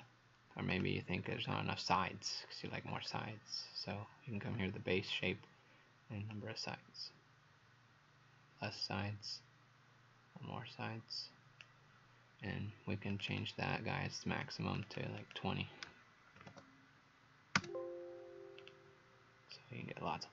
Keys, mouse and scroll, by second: 1.2-2.8 scroll down 8, 2.8-3.2 scroll up 5, 3.9-4.5 scroll down 1, 4.5-5.1 scroll up 2, 6.3 click, 13.3 click, 14.4 click, 14.9 click, 16.4 KP_2, 16.4 KP_0, 17.6 KP_Enter, 18.6 click.